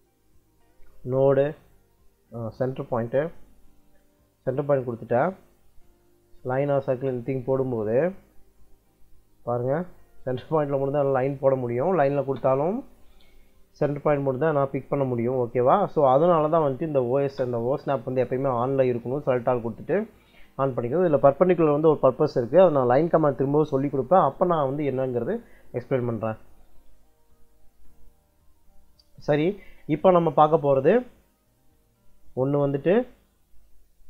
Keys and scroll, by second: 6.2 c, 6.8 space, 10.9 Escape, 11.9 l, 12.1 space, 16.3 Escape, 16.7 o, 17.0 s, 17.2 space, 28.6 Escape.